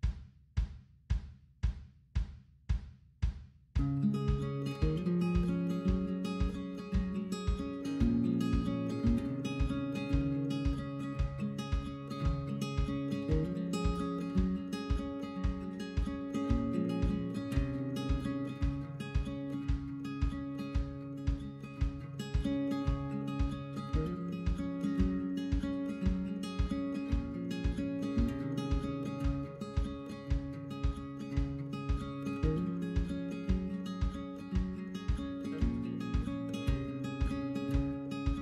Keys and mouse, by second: 3.4 right click, 3.5-6.1 drag, 6.7 right click, 6.9 click, 7.7 right click, 7.7 click, 7.9 ctrl+z, 8.0 right click, 8.1 click, 8.2 right click, 8.3 click, 9.5 ctrl+z, 9.6-14.0 drag, 14.2-16.0 drag, 16.2-19.1 drag, 19.5 right click, 19.6 click, 20.9 right click, 21.0 click, 23.3-28.3 drag, 28.3 right click, 28.4 click, 30.1 right click, 30.2 click, 33.0 click, 35.0-37.1 drag, 37.1 click, 37.6 click, 38.2-38.4 drag.